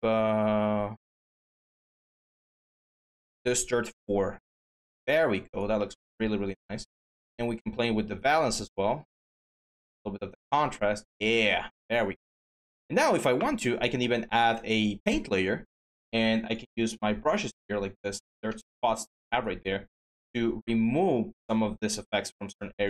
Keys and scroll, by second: 18.9 typing.